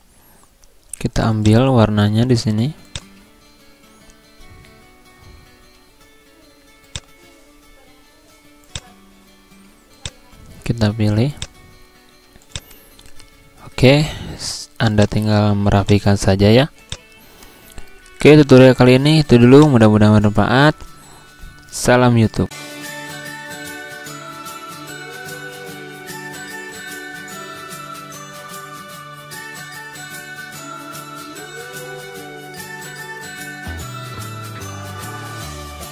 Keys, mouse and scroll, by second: 6.9 click, 12.5 click, 15.0 click, 15.8 shift+click, 17.4-18.5 scroll down 1, 18.5-19.0 scroll up 1, 19.6 click, 22.4 ctrl+End.